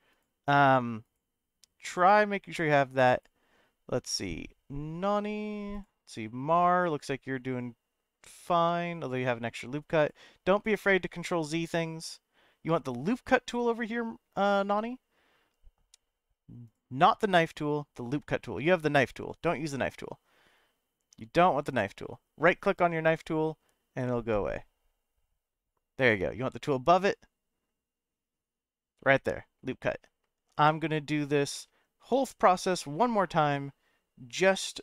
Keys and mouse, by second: 31.5 middle click, 32.0 Tab.